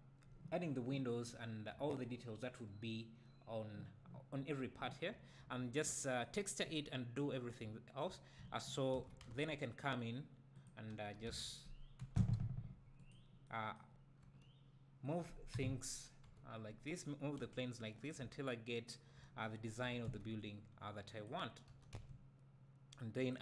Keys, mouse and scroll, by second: 7.3-7.6 scroll down 1, 7.6 `, 8.9 shift+d, 10.6 click, 11.0 r, 13.1 click, 14.2 g, 15.2 right click, 16.2 KP_7, 17.4 g, 18.1 click, 18.2 `, 19.8 g, 21.2 click, 21.7 g, 23.3 click.